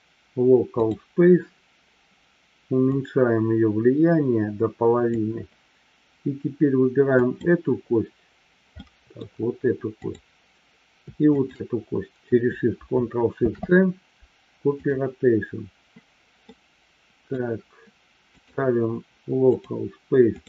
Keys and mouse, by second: 2.8-5.2 drag, 7.2 click, 8.8-9.2 middle drag, 9.9-10.7 drag, 11.4 shift+click, 13.4 ctrl+shift+c, 16.4-17.4 middle drag, 18.4-19.9 drag, 20.3-20.4 drag.